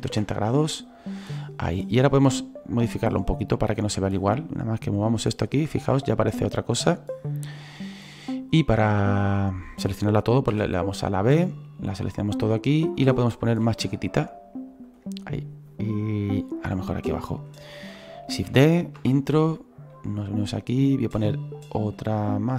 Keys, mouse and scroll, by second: 2.3 right click, 3.1-8.3 drag, 8.3-8.8 scroll up 4, 8.8-11.9 shift+middle drag, 11.9 b, 15.7-18.5 drag, 18.5 shift+d, 19.9-22.5 drag.